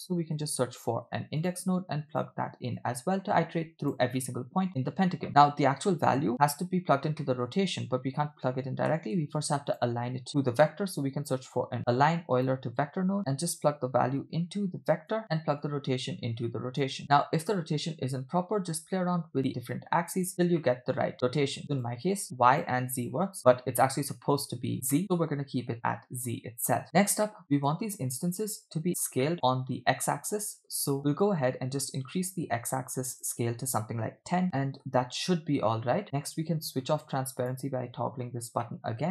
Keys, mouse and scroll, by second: 2.8-4.1 drag, 5.3 click, 5.3 middle click, 7.2 middle click, 9.0 shift+a, 13.2 ctrl+z, 13.7 drag, 13.9-15.2 drag, 15.2 scroll up 2, 15.7-16.9 drag, 17.1-18.3 middle drag, 19.4 click, 20.2 click, 20.6 middle click, 21.8 click, 22.6 click, 23.1 click, 23.6 middle click, 25.0-26.8 middle drag, 27.0 click, 27.0 scroll down 2, 27.3 middle click, 27.4 click, 29.3 middle click, 31.2-33.2 drag, 33.4-34.4 drag, 34.4 middle click, 34.4-34.9 scroll down 3, 35.3 scroll up 2, 37.4 click, 38.7 middle click.